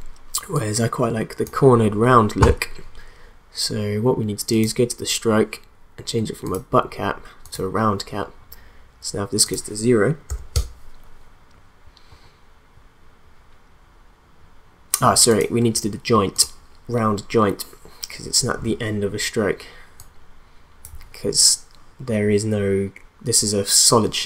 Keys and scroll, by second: 10.3 0, 10.5 Return.